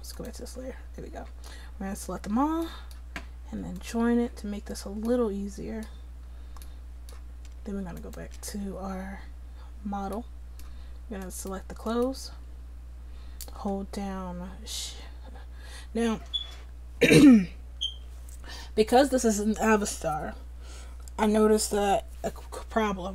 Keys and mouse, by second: 1.2 a, 5.2-7.4 drag, 7.6-23.1 drag.